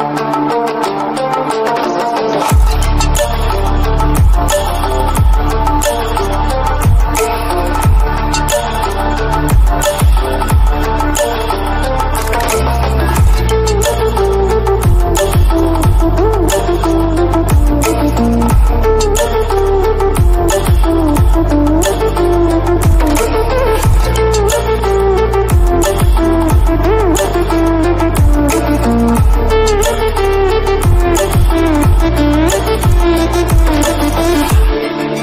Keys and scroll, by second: 5.1 ctrl+=, 20.8 ctrl+-, 28.3 ctrl+-, 33.8 ctrl+=.